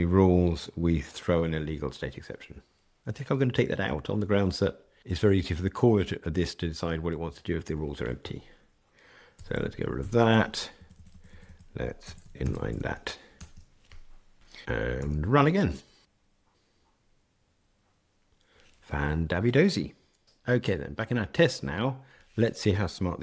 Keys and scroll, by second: 9.3 super+BackSpace, 14.9 ctrl+r.